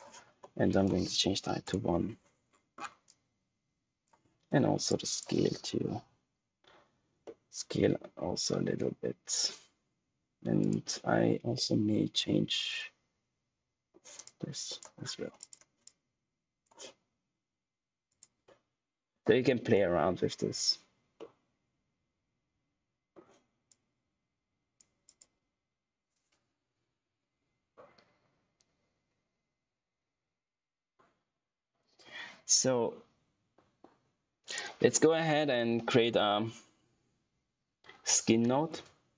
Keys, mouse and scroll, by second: 1.6 Return, 2.4-3.0 scroll down 1, 3.0 click, 7.2 middle click, 10.5 click, 11.5 middle click, 14.2 click, 14.9-15.3 scroll down 1, 15.3 click, 19.6 middle click, 23.6 click, 34.4 right click, 37.8-38.8 typing.